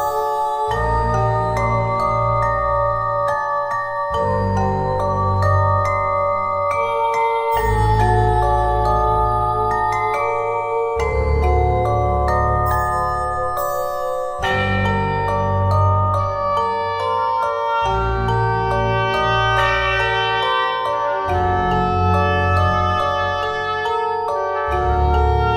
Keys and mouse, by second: 2.8 middle click, 3.3 click, 5.8 e, 8.6-10.0 drag, 10.7 click, 11.7-12.7 drag, 14.6-17.0 drag, 16.2 e, 17.0-19.7 middle drag, 19.7-22.4 drag, 22.4 middle click, 22.6-25.5 drag.